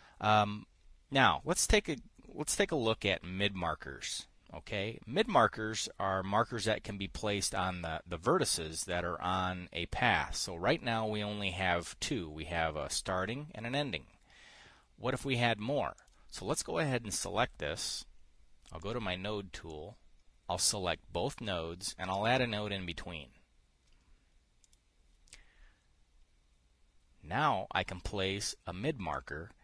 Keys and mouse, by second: 16.5 click, 19.3 click, 20.2 click, 22.7 click, 25.2 click.